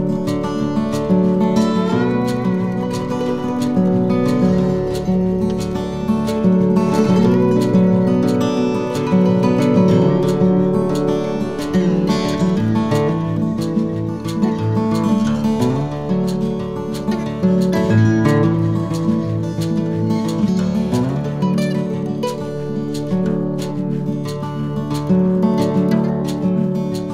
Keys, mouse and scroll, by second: 0.4 shift+d, 3.7 click, 6.9 r, 8.5 shift+d, 10.9 shift+d, 15.0 middle click, 17.4 a, 17.7 middle click, 21.2 Tab, 21.6 middle click, 22.5 shift+a, 26.0 click.